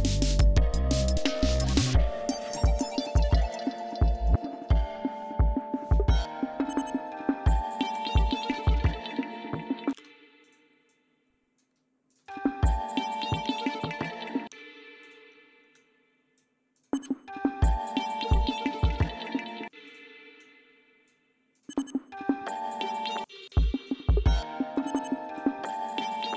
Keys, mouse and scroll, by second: 0.0 ctrl+scroll up 2, 5.3-6.2 scroll up 2, 6.2 scroll up 1, 7.1-7.6 scroll up 2, 7.7-8.8 scroll up 4, 9.7 space, 10.2 click, 10.6 click, 11.9 click, 12.0 space, 14.3 space, 14.8 click, 15.5 click, 16.5 click, 16.7 space, 19.5 space, 19.6 click, 20.2 click, 21.4 space, 23.0 space, 23.7 ctrl+scroll up 3, 26.1 scroll down 2.